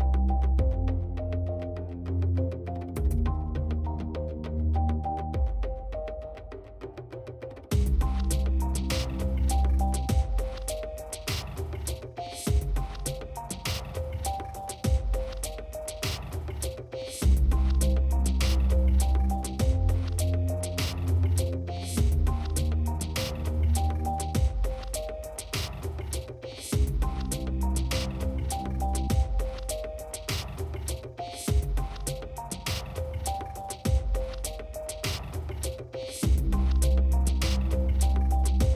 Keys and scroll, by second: 9.1 shift+s, 9.5 shift+s, 9.9 shift+s, 10.6 shift+s, 12.3 shift+s, 12.7 shift+s, 19.5-20.6 typing, 26.0 shift+s, 26.9 shift+s, 27.7 shift+s, 33.6 shift+s, 34.1 shift+s, 34.6 shift+s, 35.5 F4, 35.7 F4, 37.6 shift+s.